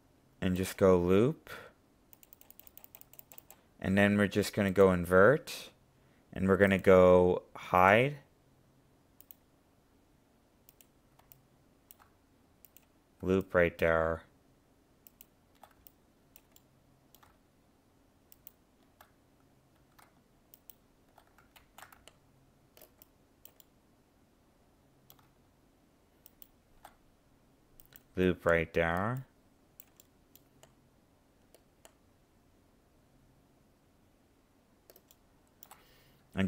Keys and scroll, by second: 21.5 ctrl+z.